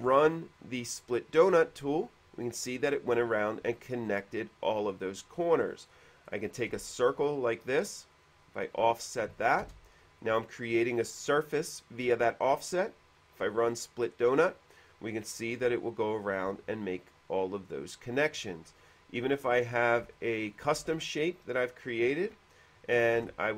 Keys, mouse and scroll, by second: 0.2 click, 4.0-5.1 shift+middle drag, 5.8 middle click, 6.5 click, 7.1 p, 8.4 click, 9.6 click, 9.9 space, 9.9 f, 10.6 click, 12.9 click, 16.9-18.5 shift+middle drag, 19.0 click, 19.7 scroll up 1, 20.3 shift+middle click, 22.0 click, 23.4 ctrl+z, 23.4 f.